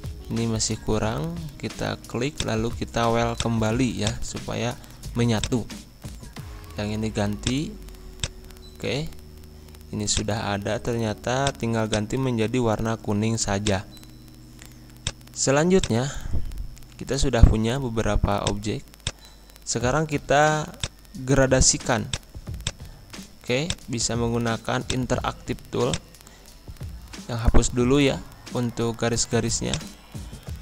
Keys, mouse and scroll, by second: 3.3 click, 4.4 scroll down 1, 5.3 click, 8.9 ctrl+z, 10.1 click, 10.6 scroll down 1, 11.4 click, 12.8 ctrl+z, 13.6 shift+click, 14.9 click, 16.3 ctrl+z, 18.4 click, 24.0 scroll down 1, 24.8 click, 25.8-29.3 alt+drag, 29.3 Delete, 29.6-30.6 drag.